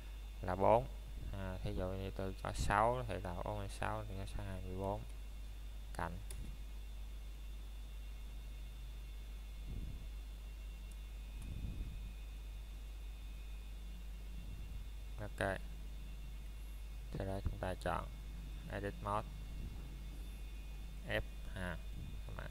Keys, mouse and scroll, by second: 10.0 click, 20.7 BackSpace.